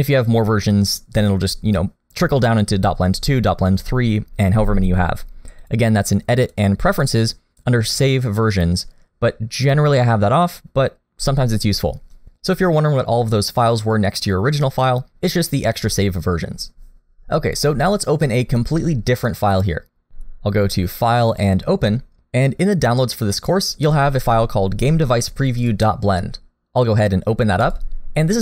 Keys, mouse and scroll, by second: 5.6 click, 20.6 click.